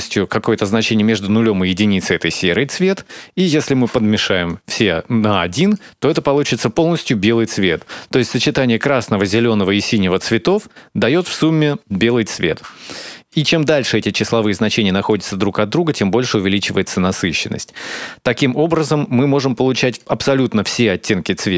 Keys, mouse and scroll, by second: 3.1 click, 4.2 click, 5.1 click, 13.2 click, 13.5 click, 17.4 click.